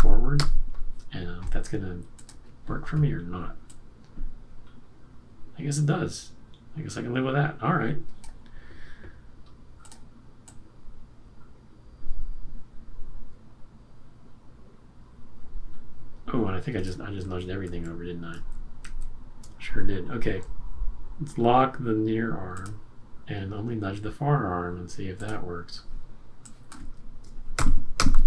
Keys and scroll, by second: 0.3 shift+Right, 17.2 super+z, 18.8 super+z, 27.5 shift+Right.